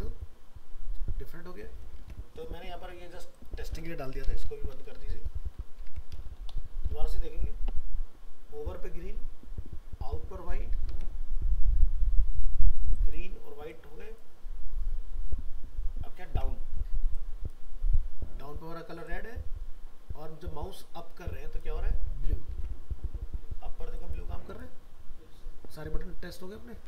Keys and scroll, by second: 2.0 alt+Tab, 5.1 ctrl+s, 5.8 alt+Tab, 10.9 alt+Tab, 16.3 alt+Tab, 22.5 alt+Tab.